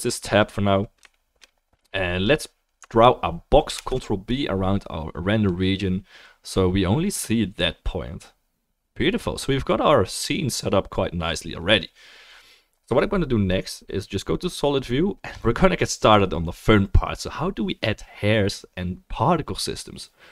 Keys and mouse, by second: 0.6-4.5 middle drag, 0.6-4.5 right drag, 3.7 ctrl+b, 6.8-14.4 drag, 6.8-18.1 middle drag, 6.8-20.3 right drag.